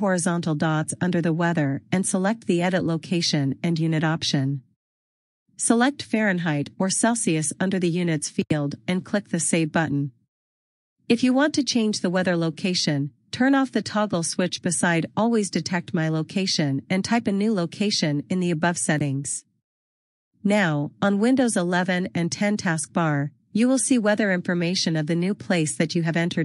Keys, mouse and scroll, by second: 3.8 click, 5.7 click.